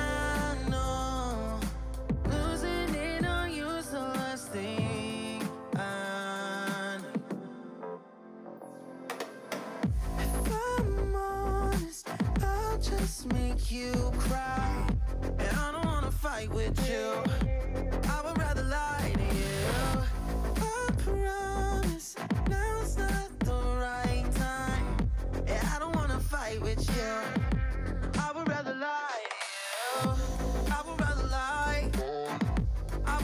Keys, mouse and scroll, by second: 0.0 click, 0.2 middle click, 1.2-1.6 scroll up 6, 1.6-2.2 middle drag, 2.2 click, 2.3-3.7 middle drag, 4.1 scroll down 4, 4.2 middle click, 4.5 ctrl+z, 4.7 ctrl+z, 5.0 click, 5.2-6.1 shift+middle drag, 6.1 click, 6.4 shift+click, 6.6 shift+click, 6.8 shift+click, 7.0-7.5 middle drag, 7.5 scroll down 1, 7.6-8.6 middle drag, 8.6 shift+click, 8.8 shift+click, 9.2 shift+drag, 9.4 shift+click, 9.9 Tab, 10.5 shift+middle click, 10.8 click, 11.2-11.8 scroll up 3, 11.8 scroll down 2, 11.9 shift+middle click, 12.3-13.3 scroll up 1, 13.3 l, 13.7 l, 13.9 middle click, 14.2 scroll down 2, 14.3 middle click, 14.6 scroll up 1, 15.1 l, 15.8 l, 16.1 middle click, 16.7-17.4 scroll up 1, 17.4 l, 18.0 l, 18.2 middle click, 18.5-19.1 scroll up 1, 19.1 l, 19.6 l, 19.8 middle click, 20.2 KP_3, 20.4 shift+middle click, 20.7 KP_1, 21.0 shift+middle click, 21.2 scroll up 2, 21.4 alt+z, 21.6-21.9 shift+middle drag, 21.9-22.6 scroll up 1, 22.6 s, 24.7 s, 28.3 s, 30.1 ., 31.5 s.